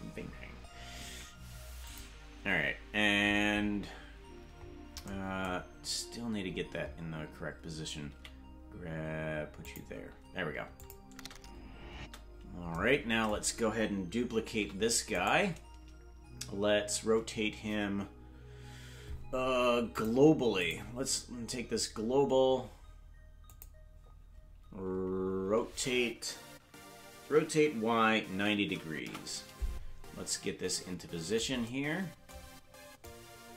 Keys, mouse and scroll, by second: 1.9 click, 3.2-3.8 scroll up 14, 4.6 scroll up 4, 6.4-7.2 scroll up 5, 8.1 g, 9.1 g, 10.8 click, 11.1 space, 12.0 space, 12.3-12.7 scroll down 4, 19.9-20.9 drag, 23.4 click, 27.2 r, 33.0-33.5 drag.